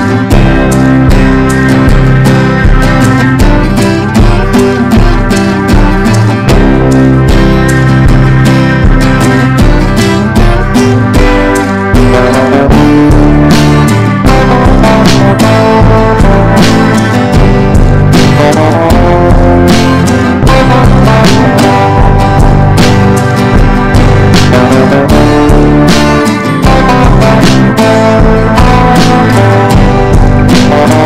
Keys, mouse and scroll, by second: 6.9-17.2 ctrl+drag, 20.2-22.7 drag, 23.4 ctrl+d, 23.7 click, 24.9 right click, 25.4-31.0 drag.